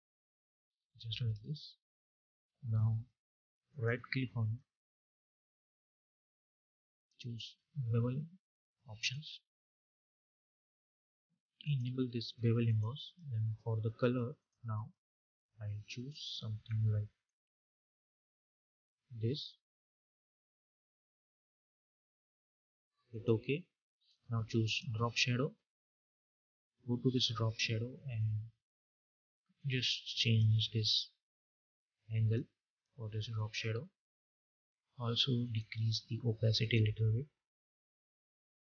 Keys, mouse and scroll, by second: 1.3 Return, 3.5 right click, 4.7 click, 5.6 right click, 8.8 click, 11.5-34.8 drag, 35.3 click.